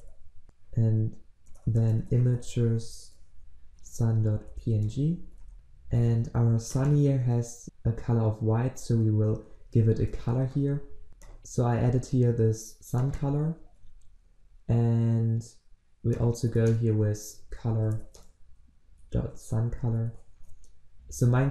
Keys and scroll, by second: 10.2 ctrl+alt+Left, 13.6 ctrl+c, 19.2 ctrl+v, 20.9 ctrl+z.